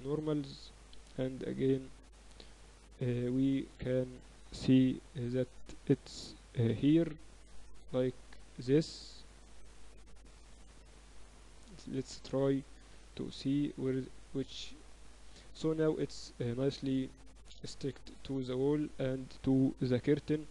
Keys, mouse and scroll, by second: 1.0 KP_6, 1.2 KP_6, 1.2 KP_3, 1.4 KP_6, 2.0 Tab, 2.9 KP_7, 3.2 z, 3.8 a, 4.9 b, 6.0 a, 6.1 a, 6.8 b, 7.8-8.8 drag, 10.1-15.9 typing, 10.5 Tab, 17.2 z, 17.6 z, 18.9-20.5 right drag, 19.9 ctrl+j.